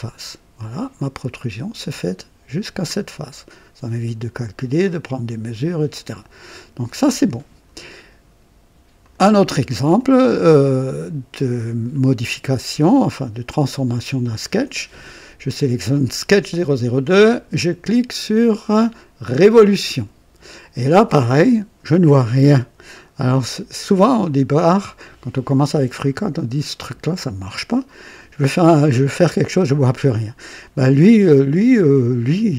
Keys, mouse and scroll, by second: 0.6-2.8 drag, 4.8 click, 5.9 click, 9.0 click, 10.3-12.0 drag, 12.2-13.2 drag, 19.3 click.